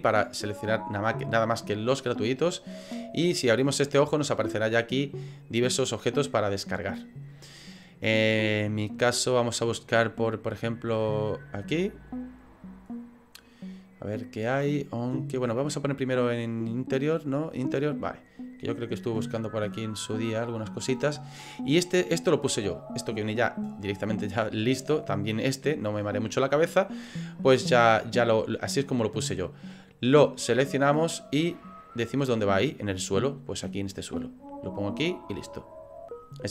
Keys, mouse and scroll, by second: 3.3 click, 3.8 click, 11.3 click, 17.5 click.